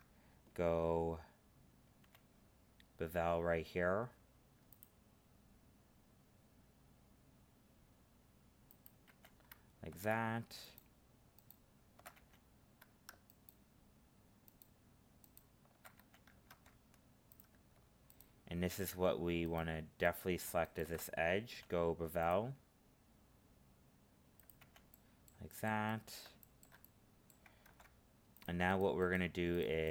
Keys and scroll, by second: 16.4 ctrl+Tab, 27.6 ctrl+Tab.